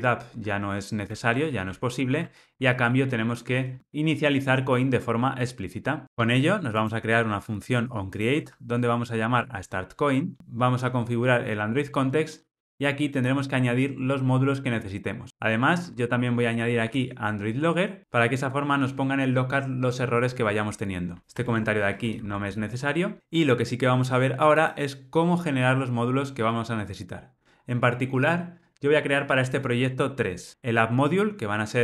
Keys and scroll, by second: 1.0 super+BackSpace, 1.9 super+BackSpace, 6.0 Tab, 9.2 alt+Return, 18.0 Return, 21.4 super+BackSpace, 23.2 ctrl+alt+o.